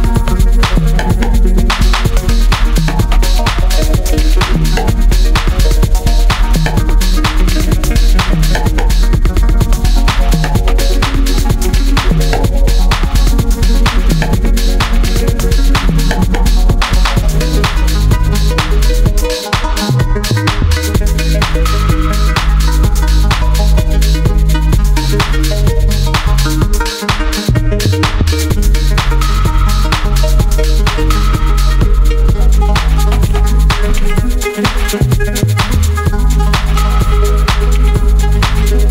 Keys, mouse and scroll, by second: 34.4 click, 34.7 scroll down 1, 36.4 click.